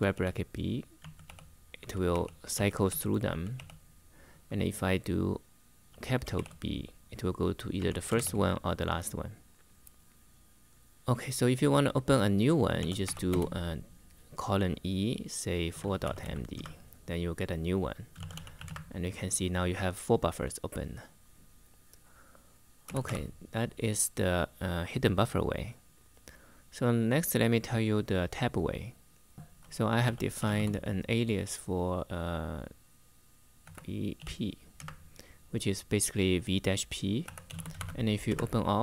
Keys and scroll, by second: 0.0-3.8 typing, 5.6 [, 6.1 shift+b, 7.5 ], 7.9 b, 12.3-13.3 typing, 15.2-16.4 typing, 17.8-18.6 typing, 22.3-23.3 typing, 29.4-30.7 typing, 33.4 v, 33.9 p, 34.5 Return, 36.7-38.0 typing, 38.0 Return.